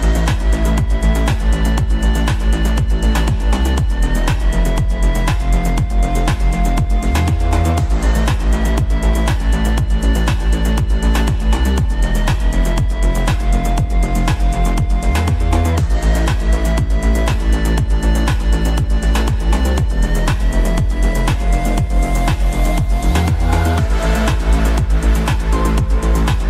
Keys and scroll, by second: 15.0 ctrl+Page_Down.